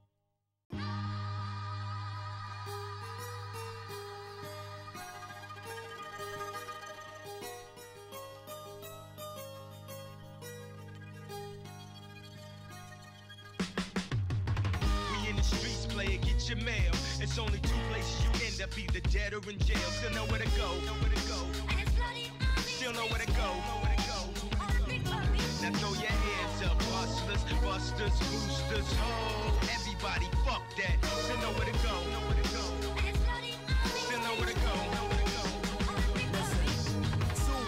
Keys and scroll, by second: 12.2 space.